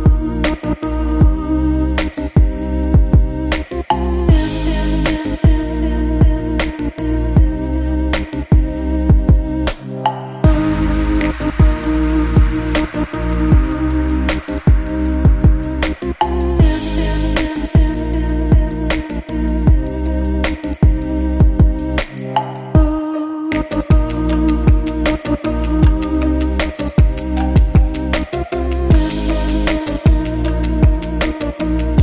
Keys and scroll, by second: 1.9 shift+m, 4.1 a, 5.3 Home, 6.1 a, 7.1 KP_Subtract, 7.6 a, 8.6 a, 9.1 Delete, 10.0 Delete, 10.3 a, 11.1 a, 11.8 Delete, 14.7 shift+m, 19.7 a, 21.3 Delete, 21.9 Delete, 22.5 Delete.